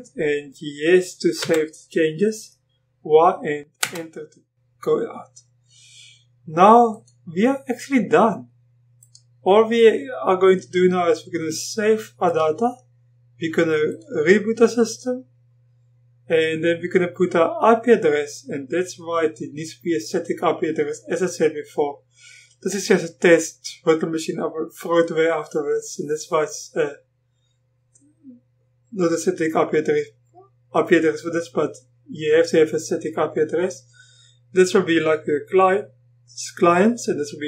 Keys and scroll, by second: 1.4 y, 3.8 Return.